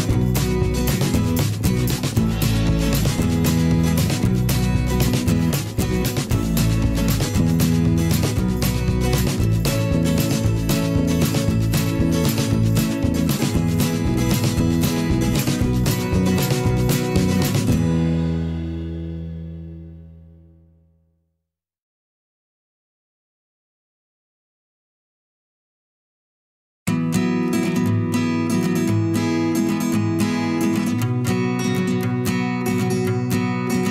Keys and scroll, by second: 4.8-7.1 typing, 8.3 Return, 8.5-9.2 typing, 11.9 n, 12.3 Return, 15.3 n, 15.7 a, 16.0 Return, 16.4 ctrl+shift+., 20.3 alt+Up, 21.6 ctrl+shift+., 23.5 alt+Down, 24.2 shift+Right, 27.5 shift+Left, 30.1 i, 30.6 v.